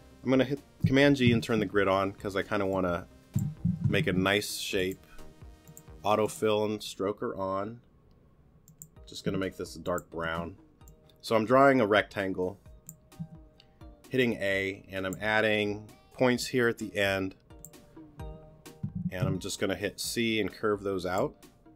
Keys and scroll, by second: 1.1 super+g, 3.7 super+z, 13.2 a, 19.0 c.